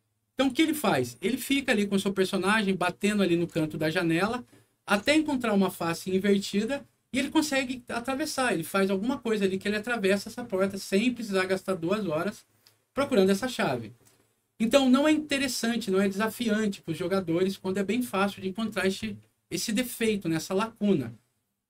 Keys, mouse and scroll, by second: 1.7-3.0 alt+middle drag, 3.7-4.8 ctrl+alt+middle drag, 19.1 alt+middle click, 20.3 alt+scroll down 1.